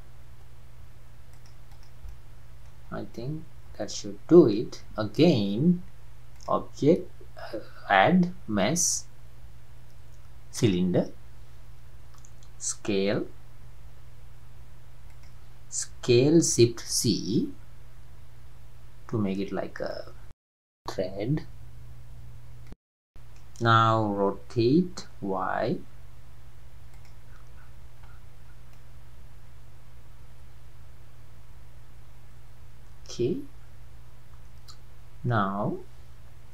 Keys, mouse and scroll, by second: 1.7 drag, 2.1-2.8 middle drag, 2.8-3.2 scroll down 2, 3.2-6.3 middle drag, 6.3-9.5 drag, 11.3-11.7 scroll down 5, 13.7 s, 16.1 s, 20.1-20.8 scroll up 8, 20.8-23.9 middle drag, 24.7 r, 27.3-27.7 scroll up 8, 28.0-28.8 scroll down 4, 28.8-31.8 middle drag.